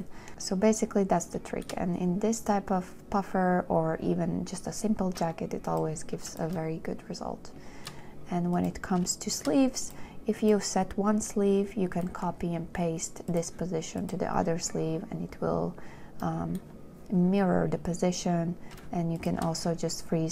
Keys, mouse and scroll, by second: 0.3 shift+click, 9.6 shift+click, 19.5 shift+click.